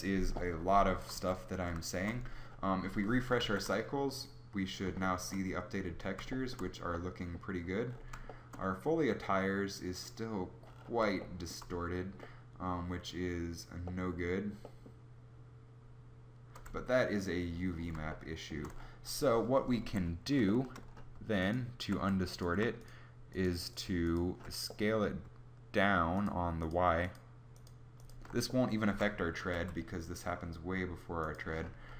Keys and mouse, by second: 0.9 z, 1.1 z, 3.5 shift+z, 16.8 Tab, 19.8 a, 29.5 s.